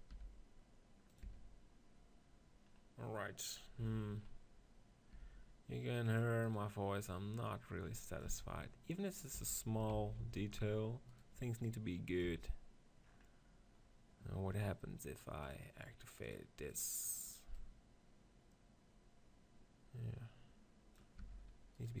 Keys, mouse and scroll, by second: 0.0 r, 1.0 right click, 1.0 click, 1.1 Tab, 1.6-2.9 drag, 2.9-5.9 middle drag, 3.7 Tab, 5.0 g, 6.0-9.2 drag, 6.3-8.2 right drag, 8.2 Tab, 9.2 Tab, 9.8 ctrl+z, 10.1 ctrl+z, 11.0-12.9 right drag, 11.5-13.4 drag, 12.2 Tab, 13.4-16.7 middle drag, 16.7-19.3 drag, 21.1 Tab, 21.7-22.0 drag.